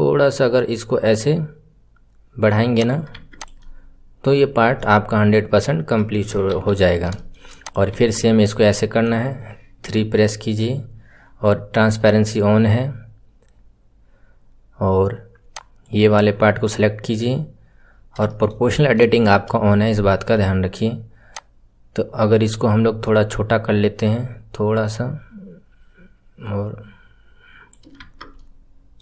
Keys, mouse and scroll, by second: 3.1 Tab, 3.3 click, 3.6-6.4 middle drag, 6.4 KP_3, 6.8-7.1 scroll up 4, 7.1 shift+middle click, 7.6 click, 8.4-9.8 middle drag, 9.8 KP_3, 10.0-15.5 middle drag, 15.5 click, 17.8-18.2 scroll down 1, 18.2-19.6 shift+middle drag, 19.6 scroll up 2, 19.8-21.3 shift+middle drag, 21.3 click, 28.0 Tab, 28.3-29.0 middle drag.